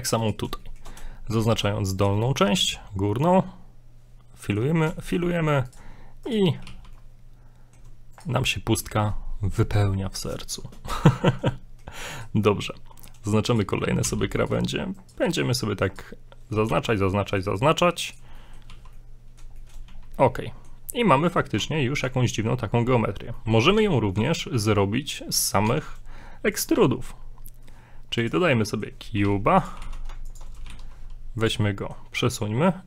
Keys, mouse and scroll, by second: 0.2 right click, 0.6 shift+middle click, 1.9 shift+right click, 2.6 f, 2.9 scroll down 3, 3.2 middle click, 4.7 scroll up 1, 5.0 shift+middle click, 5.3 scroll up 1, 5.7 right click, 6.4 shift+right click, 6.7 f, 6.9 middle click, 8.1 right click, 8.4 middle click, 11.2 shift+middle click, 11.5 middle click, 12.2 right click, 12.4 middle click, 12.9 middle click, 13.5 shift+right click, 14.4 right click, 15.0 shift+right click, 15.2 shift+right click, 15.4 middle click, 15.9 right click, 16.7 f, 17.0 middle click, 18.1 right click, 18.4 shift+middle click, 18.7 f, 19.0 middle click, 19.1 f, 19.6 shift+middle click, 19.9 a, 20.0 scroll down 4, 20.2 middle click, 20.9 scroll up 2, 21.1 middle click, 21.6 Tab, 22.1 Tab, 23.4 middle click, 23.8 Tab, 24.2 Tab, 25.7 Tab, 26.6 click, 26.8 shift+a, 28.5 scroll down 3, 28.6 middle click, 29.1 g, 29.8 g, 30.7 g, 31.7 middle click, 32.0 scroll up 2, 32.3 middle click.